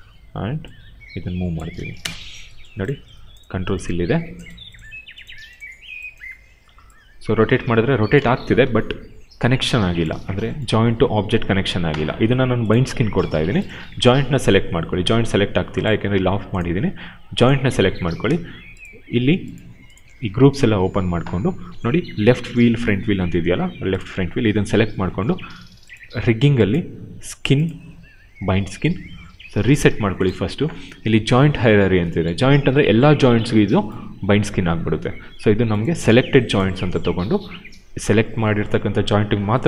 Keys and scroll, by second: 1.7 space, 6.2 e, 8.2 ctrl+z, 8.5 q, 13.2 q.